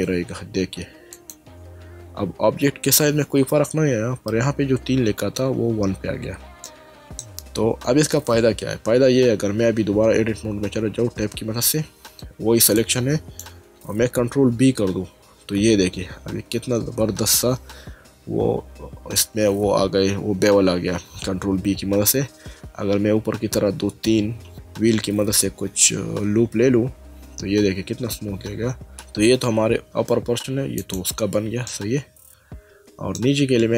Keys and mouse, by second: 1.1 click, 6.6 middle click, 11.4 Tab, 12.8 click, 14.8 ctrl+b, 30.8 click, 31.7 middle click.